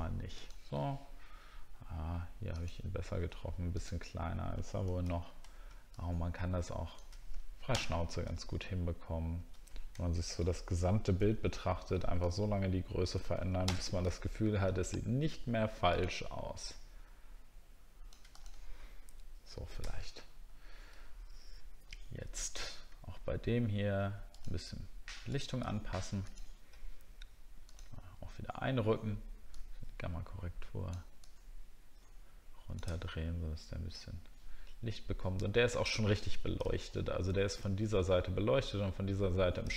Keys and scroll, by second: 8.5 alt+scroll down 1, 9.2 alt+scroll up 1, 10.0-10.8 alt+scroll down 1, 14.4 alt+scroll down 1, 19.9 alt+scroll up 1, 20.6 alt+scroll up 1, 33.0 alt+scroll down 1, 36.8-37.4 alt+scroll up 2.